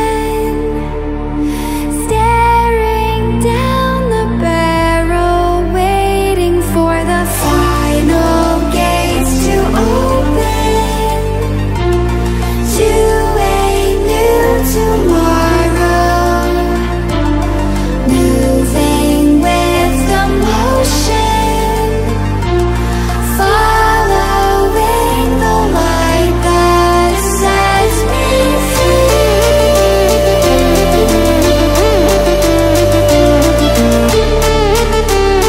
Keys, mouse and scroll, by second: 1.3 click, 2.0 ctrl+alt+scroll down 1, 3.6 ctrl+alt+scroll up 1, 7.3 ctrl+alt+scroll up 1, 8.2 ctrl+alt+scroll down 1, 11.1-11.7 click, 17.2 ctrl+alt+scroll down 1, 17.8 scroll up 2, 18.8 Caps_Lock, 21.9 click, 23.3 alt+scroll down 1, 23.9 alt+scroll up 1, 26.0-30.7 drag, 33.8 ctrl+z.